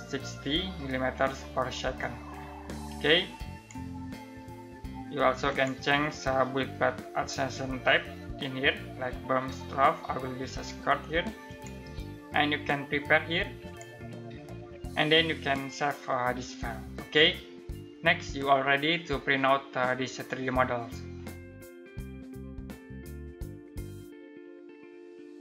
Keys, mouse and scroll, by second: 1.6 click, 11.0 click.